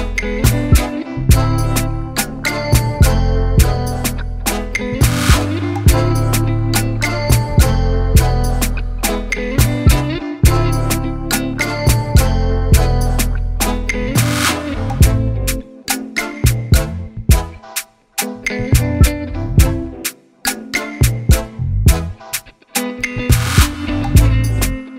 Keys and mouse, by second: 0.3 click, 1.0 click, 1.6 click, 2.3 click, 2.7 Return, 3.8 click, 6.3 click, 7.0 click, 11.8 click, 12.9 click, 13.3 alt+click, 20.0 shift+click, 21.6 ctrl+g, 22.4 click, 24.0-24.9 typing.